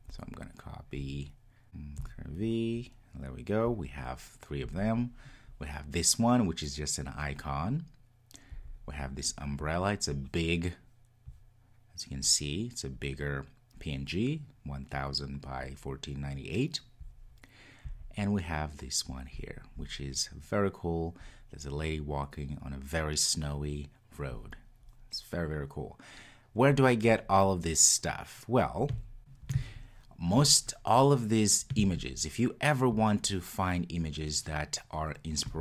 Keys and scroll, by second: 1.6 super+v.